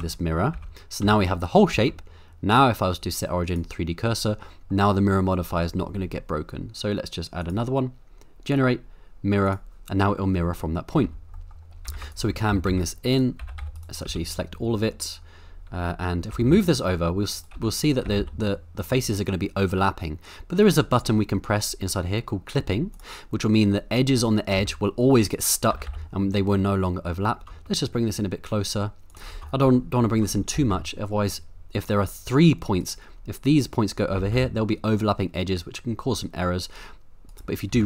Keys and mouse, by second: 0.5 Tab, 1.0 a, 1.7 Tab, 2.5-3.6 right drag, 4.1 middle click, 7.5-9.5 drag, 10.1-10.9 middle drag, 11.0 Tab, 11.3 middle click, 11.9-14.0 typing, 13.1 right click, 13.7 right click, 16.3 g, 16.5 y, 17.3 right click, 17.5 z, 18.0 g, 18.2 y, 20.6 right click, 22.9 click, 24.5 g, 25.3 right click, 25.7 g, 25.9 y, 29.1 shift+click, 29.3 shift+middle click, 29.9 middle click, 30.2 middle click, 30.5 g, 30.7 y, 32.8 right click, 34.2 g, 34.3 y, 37.3 right click, 37.7 g.